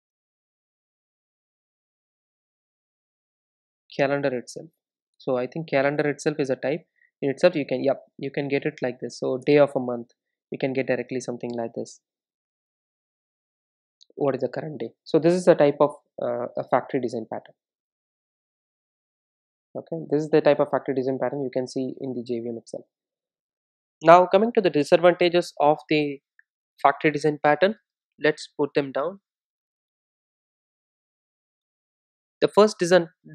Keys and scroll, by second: 5.5 Return.